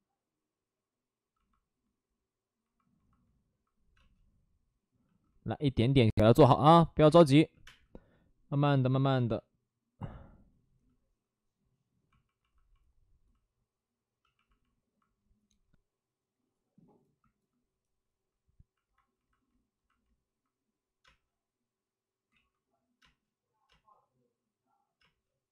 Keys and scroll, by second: 3.9 space, 6.9 space, 7.0 space, 7.4 3, 7.5 space, 9.1 space, 13.3 space, 21.0 space, 22.2 ctrl+z, 22.9 space, 23.6 space, 24.9 space.